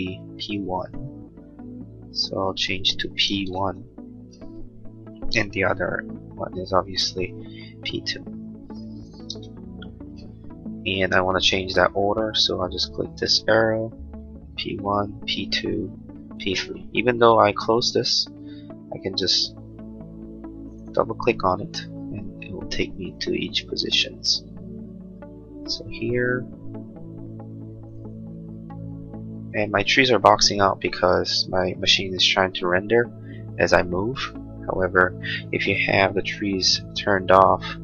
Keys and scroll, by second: 4.3 Return, 10.2 Return, 33.6 space.